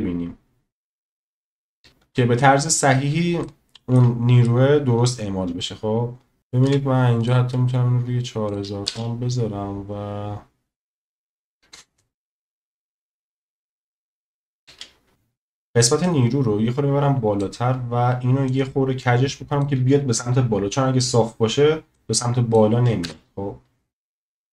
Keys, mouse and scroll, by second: 1.8 space, 3.4-4.0 shift+middle drag, 6.4 click, 8.5 click, 8.9 space, 14.6 space, 18.5 click, 21.9-22.5 drag, 23.0 space.